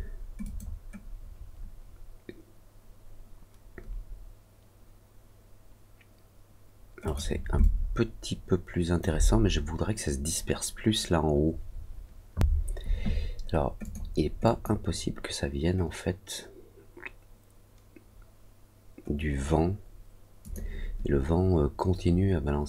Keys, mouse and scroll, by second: 0.4 click, 7.0 click, 7.5-8.9 alt+drag, 13.7 click, 14.4 click, 20.3 click.